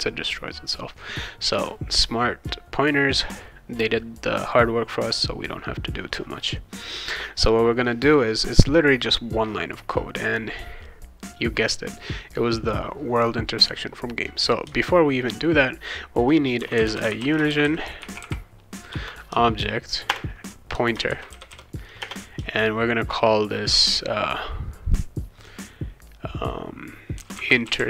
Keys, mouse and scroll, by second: 16.3-18.5 typing, 18.9 Return, 20.1-22.0 typing, 26.9-27.8 typing.